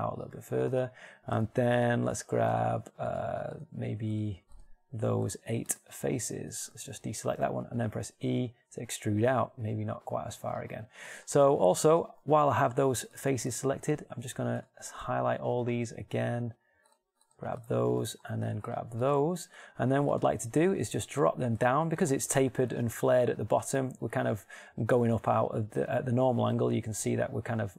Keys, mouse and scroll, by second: 0.2 e, 8.4 e, 17.5 shift+right click.